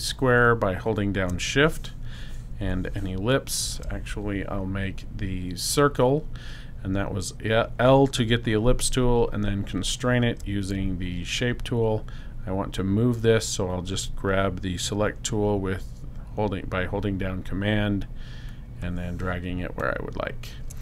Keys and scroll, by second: 3.3 shift+l.